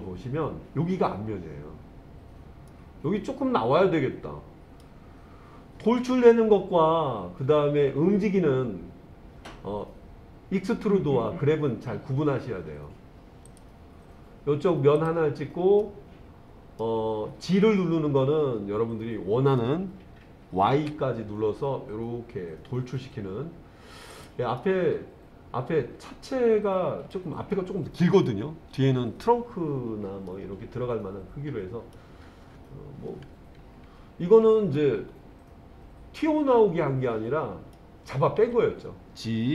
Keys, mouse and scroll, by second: 2.7-4.8 middle drag, 13.5 click, 15.0 click, 15.8-16.8 middle drag, 17.6 g, 20.8 y, 24.2 click, 24.6-27.1 middle drag, 30.3-32.0 middle drag, 34.8-37.8 middle drag, 38.4 g.